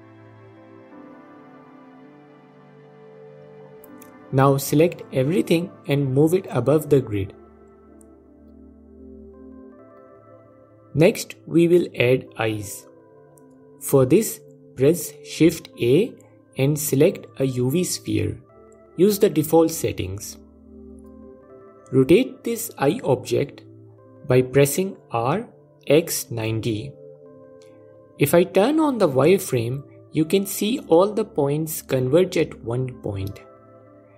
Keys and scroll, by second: 12.1 shift+a, 24.3 r, 24.9 x, 25.3 KP_9, 25.4 KP_0, 25.9 KP_Enter, 28.6 F4.